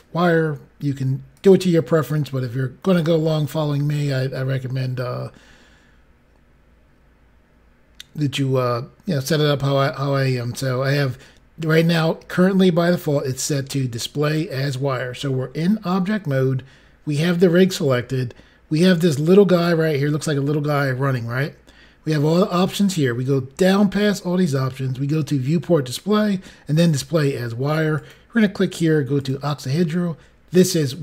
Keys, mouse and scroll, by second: 1.3 click, 2.8 click, 7.3-8.0 scroll down 5, 27.9 click, 29.1 click.